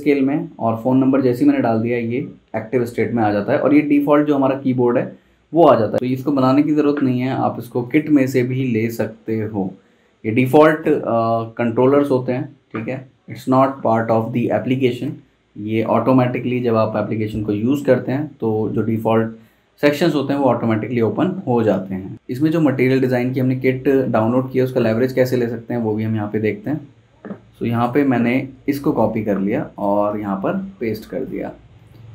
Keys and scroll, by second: 29.2 super+c, 30.1 super+v.